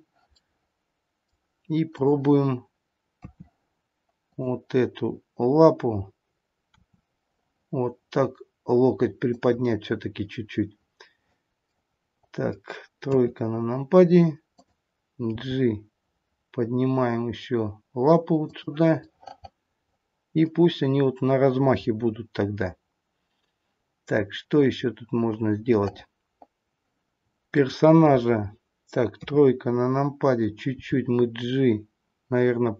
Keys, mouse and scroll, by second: 0.3 middle click, 1.0 middle click, 1.9 click, 3.1 KP_3, 4.3 click, 6.7 r, 11.7 middle click, 12.2 middle click, 13.1 KP_3, 14.5 click, 15.6 g, 19.0 middle click, 21.9-24.3 scroll up 3, 24.3-24.9 scroll down 2, 25.8 middle click, 27.4 click, 29.1 KP_3, 30.7 g.